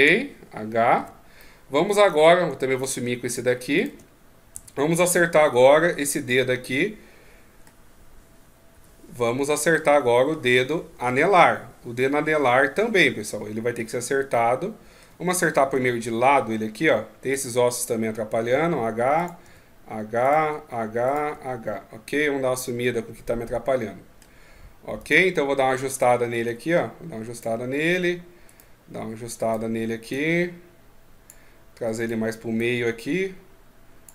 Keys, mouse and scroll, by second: 1.4 middle click, 1.4 h, 2.8 shift+right click, 3.3 shift+right click, 4.5 h, 6.4 middle click, 9.5 middle click, 10.8 KP_1, 14.1 middle click, 15.5 KP_3, 17.1 right click, 18.3 h, 18.9 right click, 19.2 h, 20.0 right click, 20.2 h, 20.8 right click, 21.0 h, 21.8 middle click, 24.7 right click, 25.7 click, 28.2 right click, 29.2 right click, 29.9 click, 31.7 right click, 32.3 click.